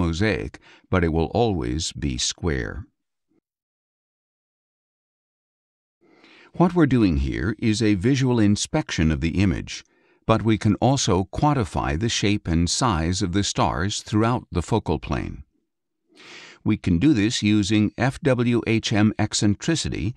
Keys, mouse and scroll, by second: 2.6 middle click, 2.6 click, 3.3 middle click, 3.3 click, 5.6 click, 7.9 click, 8.8-10.8 scroll down 2, 10.8 middle click, 11.5-17.9 scroll down 2, 17.9 click.